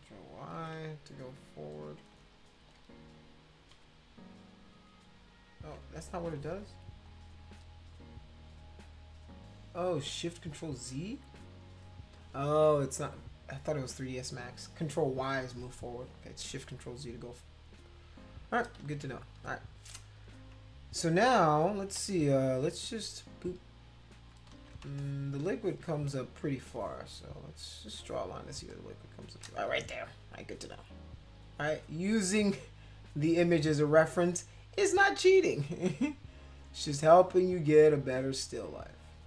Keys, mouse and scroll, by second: 0.5 ctrl+v, 2.6 ctrl+y, 3.7 ctrl+y, 4.4 ctrl+y, 4.7 ctrl+y, 7.0 click, 11.3 click, 18.2 click, 18.8 ctrl+z, 21.9 [, 22.9-24.3 drag, 24.5 ctrl+z, 24.9 space, 25.0-26.1 drag, 27.4 click, 28.7 shift+click, 31.0-33.8 drag, 35.0-38.9 drag.